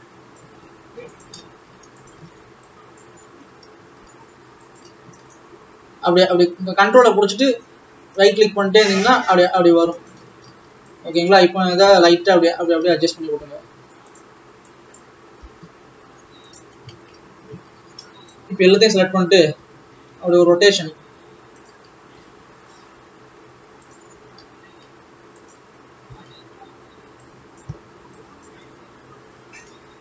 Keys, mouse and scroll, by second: 0.0 click, 0.7 s, 2.2 click, 2.4 alt+a, 3.0 click, 5.4 ctrl+Right, 6.2 ctrl+Right, 8.9 ctrl+Right, 10.2 ctrl+Right, 10.5 alt+a, 11.2 click, 11.9 g, 15.0 click, 15.4 g, 17.0 alt+a, 17.2-18.7 scroll down 1, 18.7 click, 19.6 r, 22.2 g, 24.2 g, 26.2 alt+a, 26.5-27.6 scroll down 2, 27.6 click, 28.6 click.